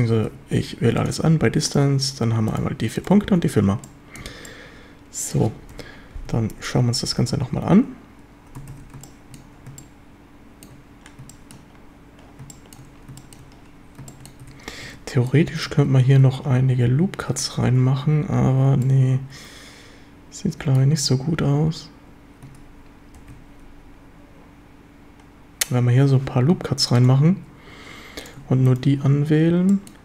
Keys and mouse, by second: 0.3 q, 1.3 a, 3.2 f, 3.3 a, 3.8-4.2 drag, 4.3 Tab, 4.5-5.3 drag, 5.7 KP_7, 6.3 a, 8.7 ctrl+s, 9.1-9.4 shift+drag, 9.8-10.7 shift+drag, 11.3 shift+drag, 12.5 shift+drag, 13.2 shift+drag, 14.1 shift+click, 14.4 Tab, 15.3-15.7 drag, 16.2 ctrl+r, 18.9-20.8 drag, 23.2 ctrl+r, 27.1 click, 29.7 middle drag.